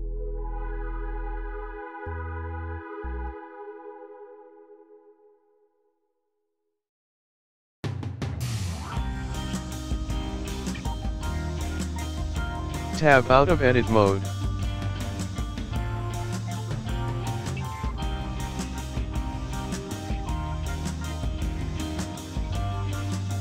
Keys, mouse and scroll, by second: 3.4 r, 7.5 g, 8.0 KP_1, 8.2 click, 8.7-9.1 scroll down 5, 9.1-10.3 scroll up 4, 12.4 click, 12.4 g, 12.7-13.1 scroll down 3, 13.1 middle click, 14.4 Tab, 15.7 click, 17.8-18.2 scroll down 6, 18.1 KP_1, 18.3 scroll up 3, 18.5 click, 18.7 scroll down 2, 18.8 scroll up 1, 19.1 click, 20.2 click.